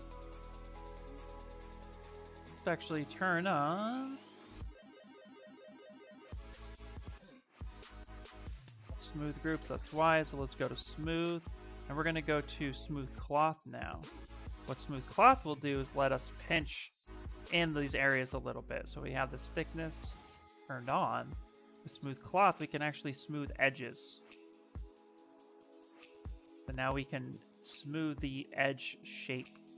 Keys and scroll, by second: 2.6 2, 4.9-6.4 typing, 18.4 d.